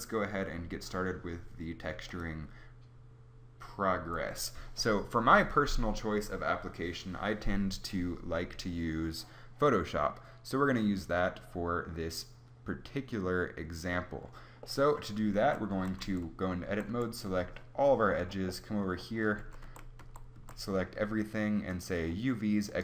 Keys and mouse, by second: 2.1 click, 15.4 Tab, 15.7 a, 16.0-16.9 a, 19.4 a, 19.7 a, 20.0 a, 20.4 a.